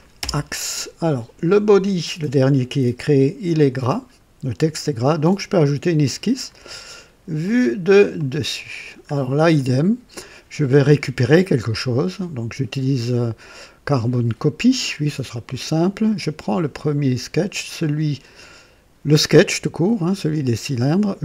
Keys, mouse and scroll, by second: 0.1 typing, 5.9 click, 7.3 click, 8.1 click, 9.0 scroll up 2, 9.5-10.3 right drag, 15.2 click, 20.0 click.